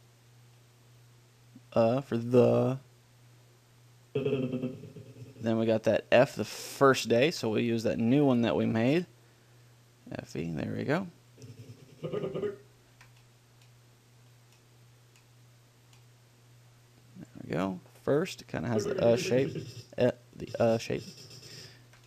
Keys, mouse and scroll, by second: 4.4-5.9 drag, 7.6 ctrl+l, 7.8-9.3 middle drag, 11.6-13.5 drag, 13.2 ctrl+l, 19.0-20.7 drag.